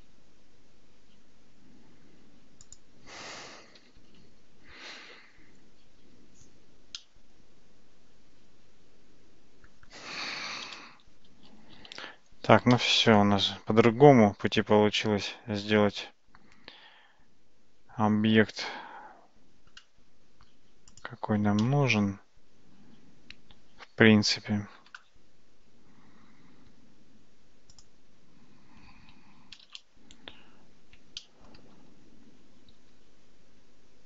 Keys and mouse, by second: 2.8-4.9 drag, 7.0-9.7 middle drag, 11.3 shift+z, 12.8-19.8 middle drag, 21.0 click, 21.6-24.8 middle drag, 29.7 shift+z, 31.2 shift+middle click.